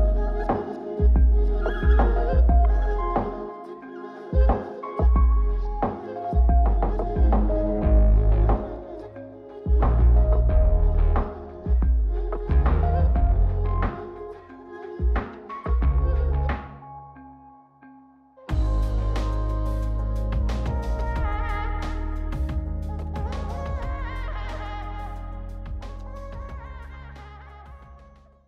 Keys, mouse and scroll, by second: 0.5 middle click, 1.7 click, 2.9 middle click, 4.0 click, 4.9 middle click, 7.0 middle click, 7.6 scroll down 2, 8.0 shift+middle click, 8.5 middle click, 9.1-9.5 scroll up 2, 9.6 shift+middle click, 10.3-11.1 scroll up 1, 11.1-12.7 drag, 12.9 middle click, 14.0-15.2 drag, 15.4 middle click, 16.6-18.9 drag, 19.5-20.5 scroll up 2, 20.8 click, 21.8-23.5 middle drag, 23.9 click, 24.8-25.3 scroll down 3, 25.3 middle click, 26.6 click.